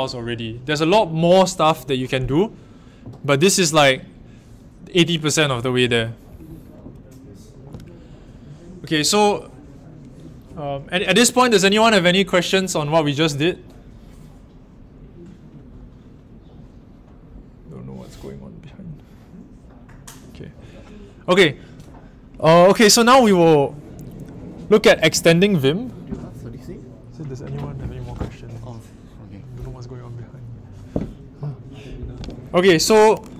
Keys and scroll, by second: 6.3 shift+;.